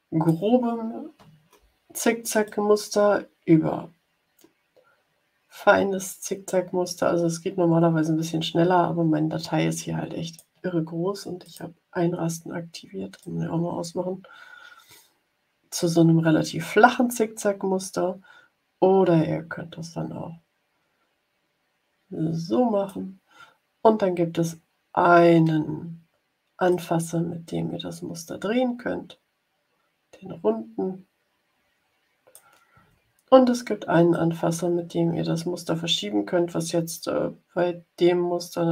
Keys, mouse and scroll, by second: 2.4-10.5 drag, 11.4 click, 13.1-23.0 drag, 26.6-32.4 drag, 34.0-38.7 drag.